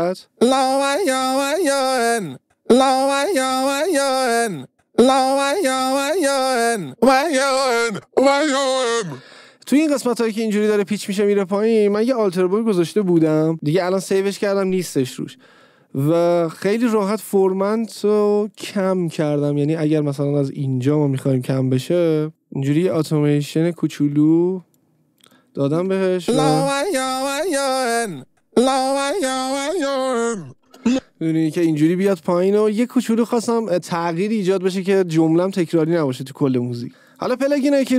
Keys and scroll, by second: 0.3 space, 9.4 space, 20.8 a, 26.2 space, 31.1 space.